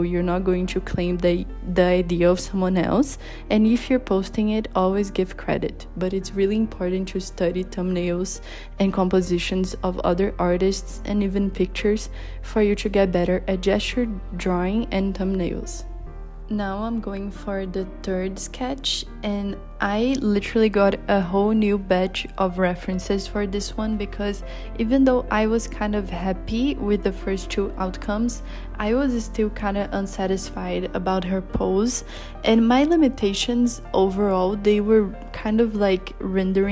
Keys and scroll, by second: 3.2 z, 4.4 h, 4.9 z, 19.6 z, 20.5 z, 20.9 h, 21.8 z, 23.6 h, 26.0 b.